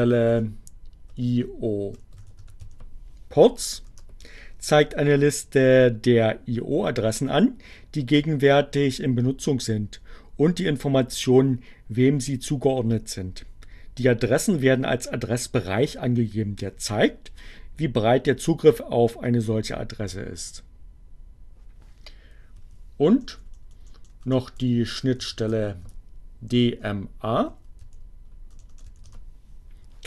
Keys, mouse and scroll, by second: 0.3 o, 1.4-2.6 typing, 3.9 Return, 21.9 Up, 23.0 BackSpace, 24.4-25.4 typing, 27.0 Up, 27.8 a, 27.9 BackSpace, 28.1 a, 29.1 Return.